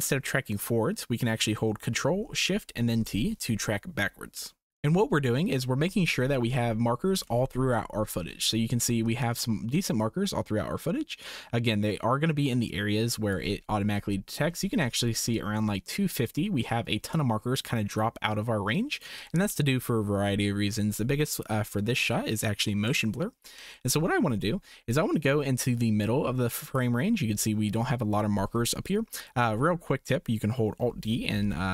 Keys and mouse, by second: 2.9 ctrl+shift+t, 6.5-7.2 drag, 10.2-13.3 drag, 15.3-19.0 drag, 24.9-26.8 drag, 31.1 alt+d.